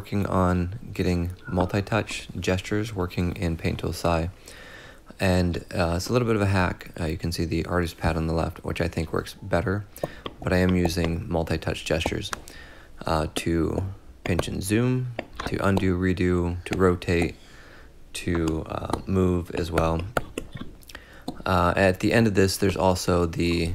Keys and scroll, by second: 18.8 x.